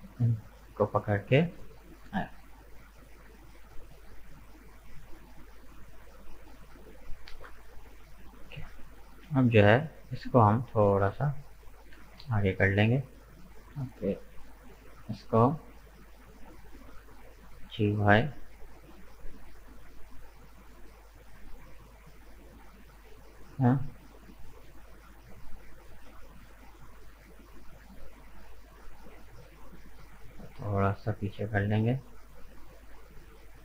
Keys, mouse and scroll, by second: 0.1-1.4 middle drag, 1.4 f, 1.9 right click, 2.2-2.6 scroll down 2, 2.6-5.6 middle drag, 8.5 middle click, 9.4 right click, 10.0 shift+right click, 10.4-11.9 middle drag, 11.9 g, 13.8 middle click, 14.7 right click, 16.6-17.6 middle drag, 17.6 g, 20.1-23.1 middle drag, 23.9-24.2 scroll up 2, 24.2-25.9 middle drag, 25.9 right click, 26.6 shift+right click, 27.8 shift+right click, 28.3-30.6 middle drag, 30.6 g.